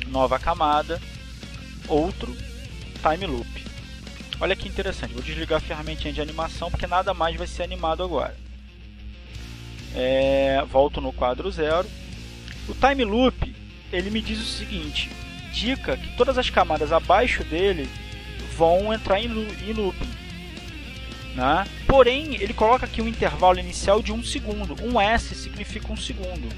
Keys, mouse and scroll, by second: 2.1 right click, 7.2 click, 9.4 click, 12.7-13.9 drag.